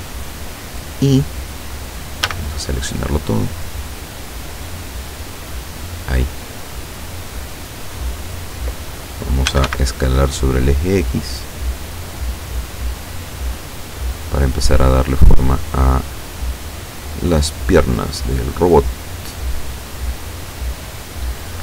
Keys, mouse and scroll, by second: 2.3 a, 3.8-8.6 drag, 8.6 middle click, 9.6 s, 9.7 x, 13.6 click, 14.8-21.0 drag.